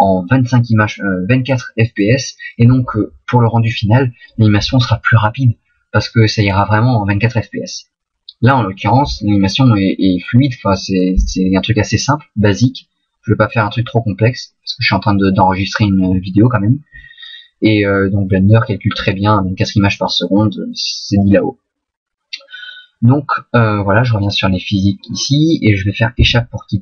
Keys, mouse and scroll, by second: 24.2 click, 26.2 Escape.